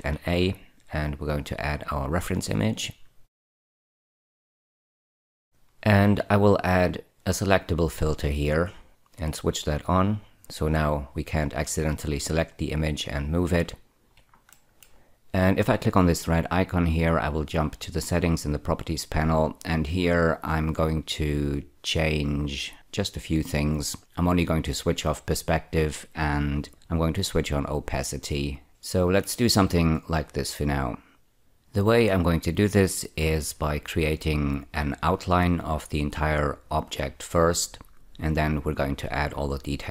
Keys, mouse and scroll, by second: 0.0 shift+a, 2.5 click, 3.8 click, 5.2 click, 5.4 double click, 5.5 middle click, 6.9 click, 8.4 click, 9.8 click, 13.4-14.1 scroll up 2, 14.4 shift+middle click, 16.7 click, 24.4 click, 26.7 click, 28.5 click, 28.7 shift+middle click.